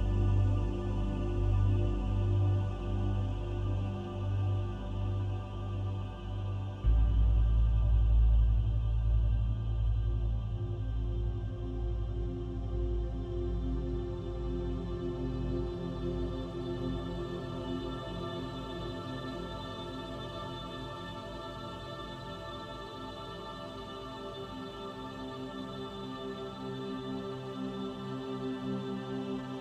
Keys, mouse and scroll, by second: 1.1 middle click, 4.5-5.0 scroll up 2, 5.0 shift+middle click, 8.2 middle click, 10.2 middle click, 13.6 click, 17.5 middle click, 20.5 click, 22.4 click, 23.4 scroll down 3, 25.2 KP_3, 26.9 click.